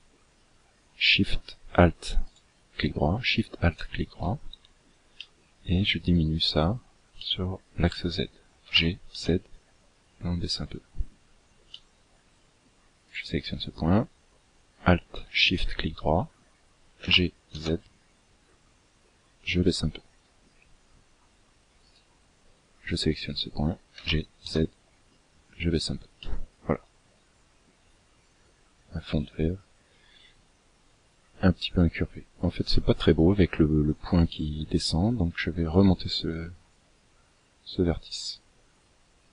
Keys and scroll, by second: 7.9 g, 16.3 g, 23.2 g.